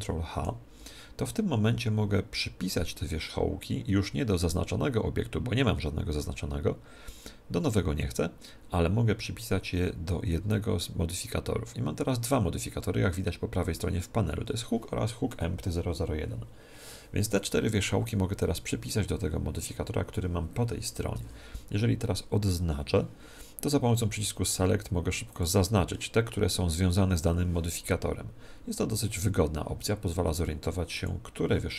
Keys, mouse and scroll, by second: 0.3 ctrl+h, 0.9 ctrl+h, 1.5 ctrl+h, 22.6 a, 25.3 click, 28.7 a, 29.3 a, 30.9 click.